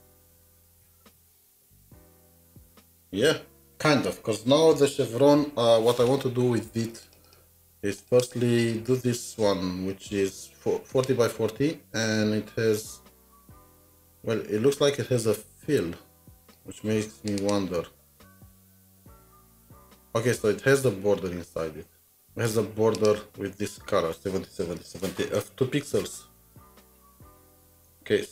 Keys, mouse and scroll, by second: 0.0-1.2 typing, 7.4 double click, 8.0 double click, 8.2 double click, 17.4 double click, 24.8 click, 25.0 ctrl+c, 25.1 typing, 25.5 click, 26.2 typing, 26.5 Escape, 27.7 alt+Tab.